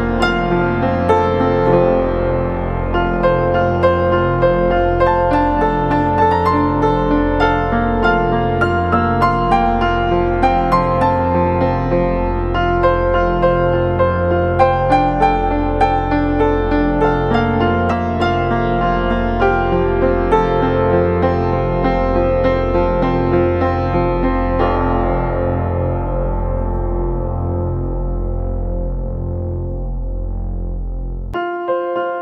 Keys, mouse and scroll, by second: 25.3-26.6 typing.